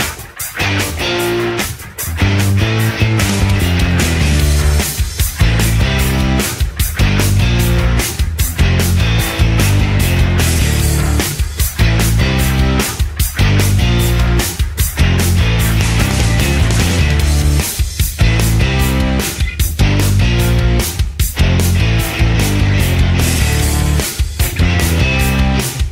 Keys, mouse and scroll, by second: 12.3 middle click.